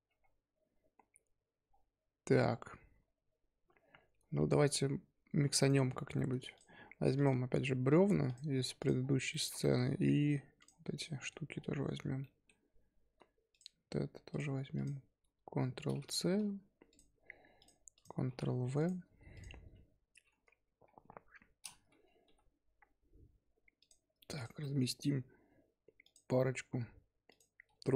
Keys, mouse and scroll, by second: 6.1-6.5 scroll down 3, 6.5 click, 7.1-8.8 drag, 9.0 scroll down 1, 9.3-9.8 shift+middle drag, 9.8-10.6 scroll up 7, 10.6 click, 10.9-11.5 middle drag, 11.5-12.2 scroll down 3, 12.2-12.6 middle drag, 12.6-13.3 scroll up 3, 13.3 scroll up 1, 13.5 shift+click, 14.3 shift+click, 14.7 shift+click, 15.8 ctrl+c, 16.0 click, 16.9 click, 17.9 click, 18.3 ctrl+v, 18.8 click, 19.3 click, 21.0 KP_7, 22.2 g, 24.3 click, 24.6 g, 26.4 g, 27.6 g.